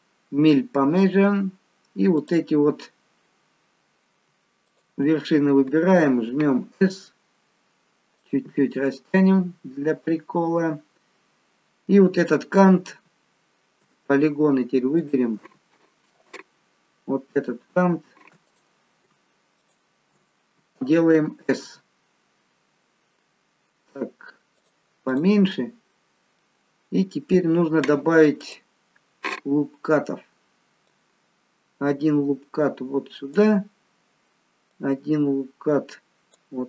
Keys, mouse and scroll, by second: 2.2 click, 4.7 shift+click, 6.8 s, 8.6 middle click, 15.1 click, 17.5 alt+shift+click, 18.5 click, 19.7 alt+shift+click, 21.5 s, 25.2 click, 25.6-26.1 scroll up 3, 26.1-26.5 scroll down 1, 26.5 middle click, 28.5 click, 30.8 click, 34.8 click.